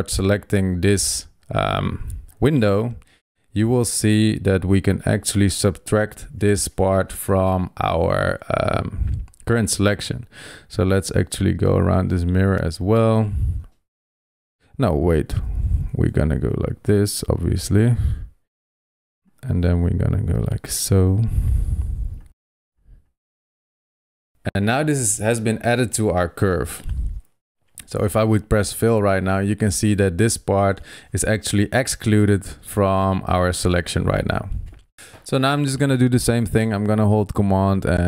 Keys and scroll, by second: 15.1 super+z, 17.5 super+z, 31.6 super+0, 34.9 super+z.